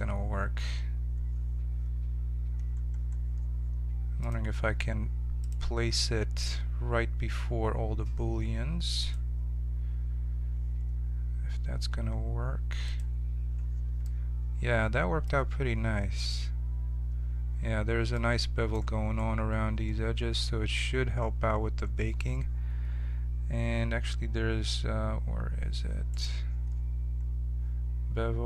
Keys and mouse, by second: 4.2-10.8 drag, 12.8-14.4 drag, 14.4-26.1 middle drag, 26.1-28.4 right drag.